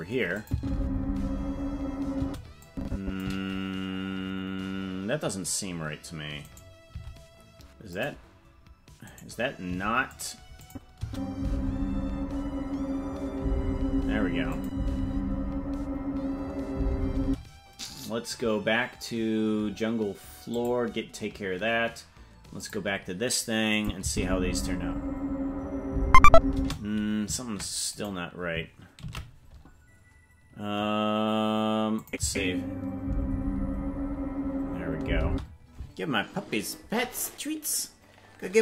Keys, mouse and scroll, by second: 0.4 click, 0.5 space, 2.2 space, 2.6 click, 6.5 right click, 6.9 t, 9.1 right click, 9.7 t, 10.6 click, 11.0 space, 14.6 click, 17.2 space, 20.7 click, 22.6 click, 23.7 click, 24.0 space, 26.6 space, 28.0 right click, 31.5 ctrl+s, 32.0 click, 32.2 space, 35.2 space.